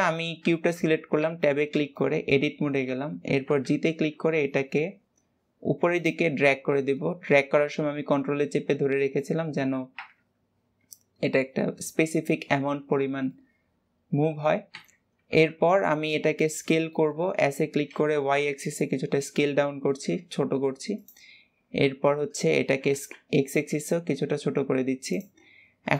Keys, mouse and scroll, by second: 0.4-1.1 shift+middle drag, 1.1 Tab, 1.8-3.1 shift+middle drag, 3.1 g, 6.8-9.9 middle drag, 9.9 KP_1, 13.1-14.6 middle drag, 14.6 Tab, 15.1 Tab, 15.9 KP_7, 16.8-17.2 shift+middle drag, 17.2 s, 21.5 KP_1, 22.5 s.